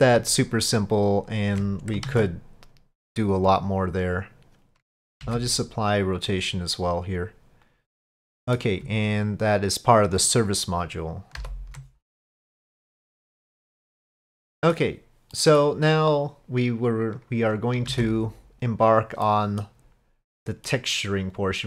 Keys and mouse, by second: 2.1 ctrl+a, 5.2 ctrl+a, 7.9 click, 8.3 middle click, 10.2 ctrl+click, 11.4 ctrl+p, 14.4-14.8 middle drag, 15.4 click, 15.6-18.0 middle drag, 17.9 ctrl+s, 18.0 click, 19.3-19.7 middle drag, 20.3-20.7 middle drag.